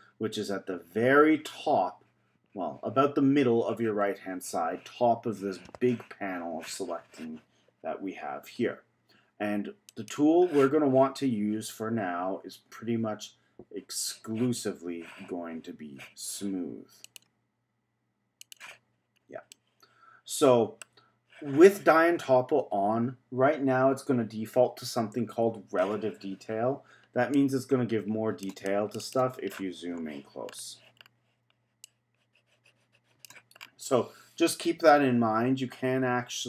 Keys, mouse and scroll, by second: 9.9 click, 17.0-18.5 drag, 19.5-22.5 middle drag, 27.3-29.5 drag, 29.5-30.5 scroll up 9, 30.5-31.8 scroll down 5, 31.8-33.6 drag, 33.6-34.8 scroll down 3, 35.5 z, 36.3 z.